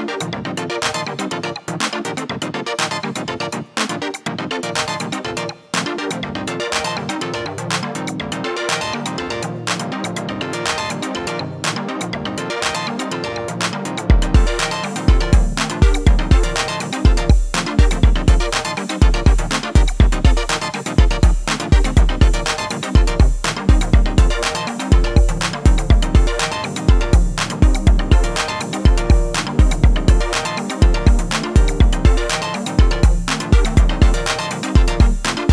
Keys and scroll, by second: 4.0 Return, 4.5 alt+[, 9.5 Return, 9.8 alt+[, 18.7 Return, 19.4 alt+[, 25.2 Return, 25.6 alt+[, 34.5 p.